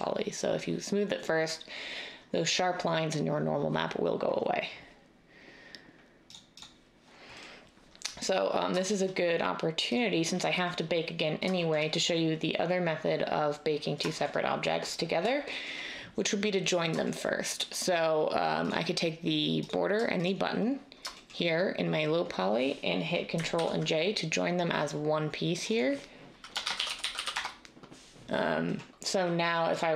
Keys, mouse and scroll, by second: 23.5 ctrl+j, 26.6-27.2 typing, 27.3 Return.